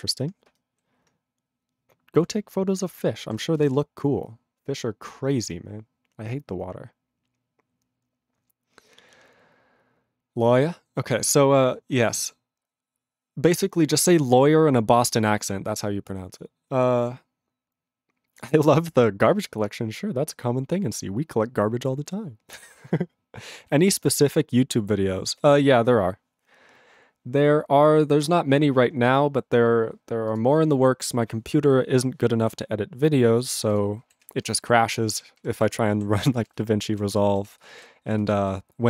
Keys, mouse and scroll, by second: 33.8 click, 34.3 ctrl+s, 34.4 ctrl+space, 34.9 ctrl+alt+b, 35.4 ctrl+g, 35.7 ctrl+e, 36.2 ctrl+s, 36.3 ctrl+space, 36.7 ctrl+alt+b, 36.9 ctrl+alt+b, 37.1 ctrl+g, 37.5 ctrl+s, 37.7 ctrl+space, 37.8 ctrl+g, 38.1 ctrl+space, 38.6 ctrl+alt+b.